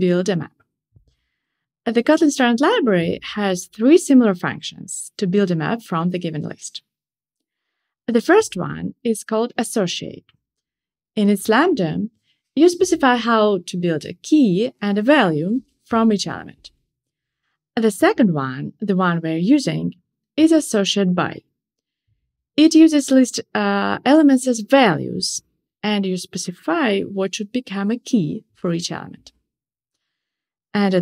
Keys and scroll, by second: 6.2 Return, 14.4 shift+super+Return, 20.7 Return, 24.2 Return.